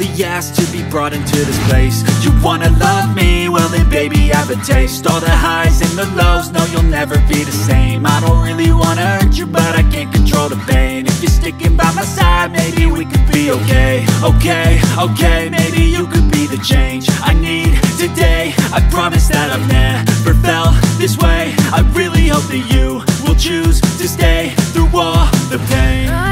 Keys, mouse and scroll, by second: 8.8 ctrl+click, 10.8 ctrl+click.